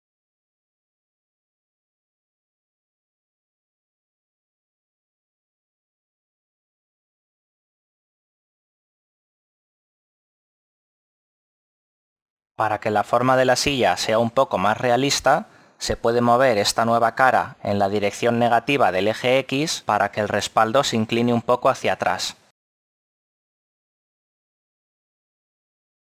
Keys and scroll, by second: 5.1 e.